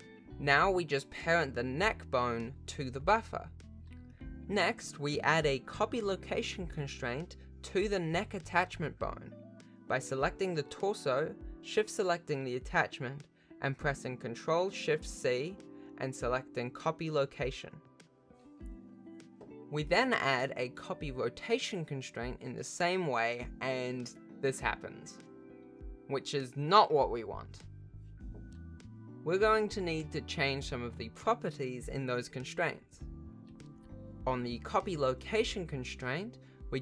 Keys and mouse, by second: 0.1 g, 2.3 ctrl+p, 3.1 alt+a, 3.9 ctrl+Tab, 8.1 ctrl+t, 8.2 ctrl+Tab, 8.9 click, 9.2 g, 12.4 shift+click, 22.7 click, 35.8 click.